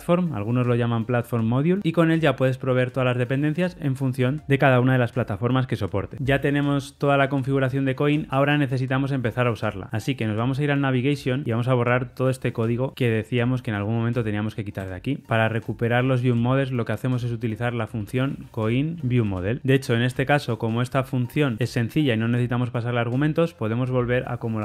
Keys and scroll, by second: 14.7 super+BackSpace, 14.7 ctrl+y, 19.2 Return, 24.0 super+x.